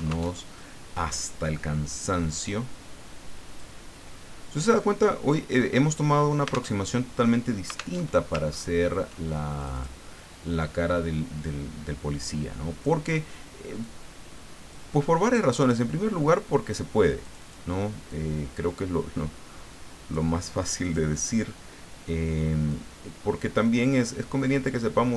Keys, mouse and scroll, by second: 0.3 alt+Tab, 2.3-3.7 drag, 4.8-6.2 drag, 6.7 alt+Tab, 7.9 alt+Tab, 8.5-9.0 ctrl+scroll up 2, 9.6 click, 10.6-13.0 drag, 13.8-15.0 drag, 15.0-16.3 middle drag, 16.3 click, 17.2 click, 18.0-20.3 drag, 20.6 click, 22.7-25.1 drag.